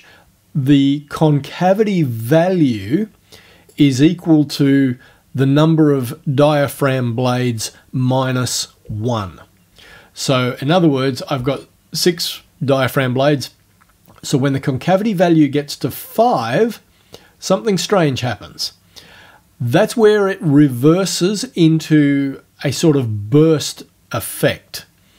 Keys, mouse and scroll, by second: 16.2-25.1 drag.